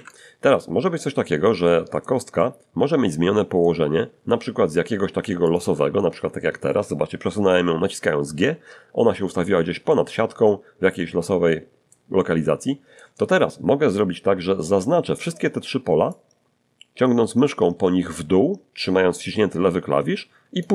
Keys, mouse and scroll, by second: 0.9-2.2 middle drag, 2.3-3.8 middle drag, 5.2 g, 5.5 click, 9.9-12.1 middle drag, 16.1-20.7 drag.